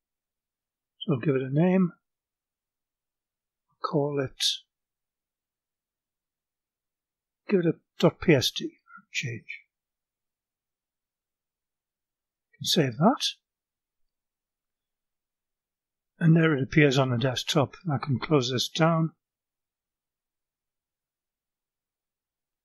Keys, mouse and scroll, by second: 0.0-1.4 typing, 6.3 click, 7.7 ., 9.4 s, 10.2 d, 13.0 click, 20.2 click, 22.2 click.